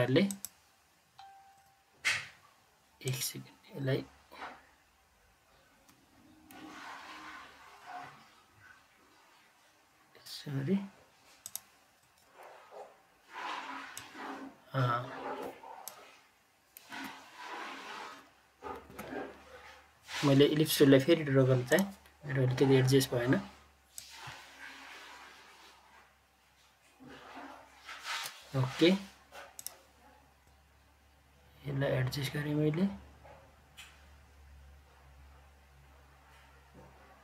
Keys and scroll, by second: 16.8 Delete, 18.8 Delete.